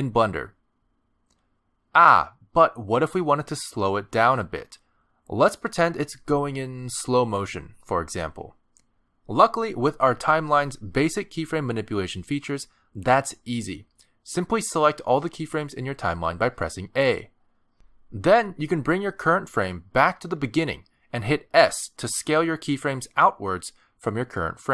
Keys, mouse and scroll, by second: 6.3 middle click, 7.5 a, 9.7-10.3 scroll down 1, 14.7 space, 15.1 click, 15.6 click, 16.6 a, 18.8 click, 22.6 s.